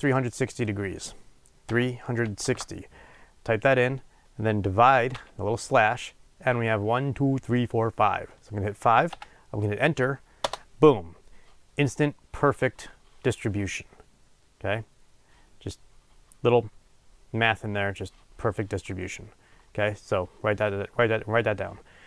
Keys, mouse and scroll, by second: 10.5 Return.